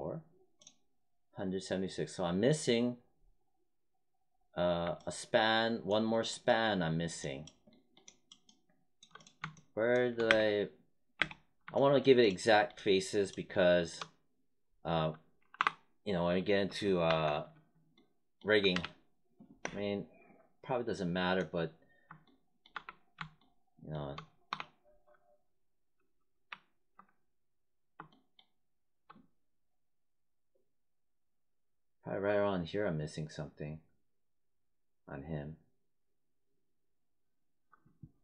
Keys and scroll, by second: 10.2 space, 15.5 5, 17.0 alt+5, 18.7 w, 22.7 w, 24.4 4, 26.4 1, 38.1 4.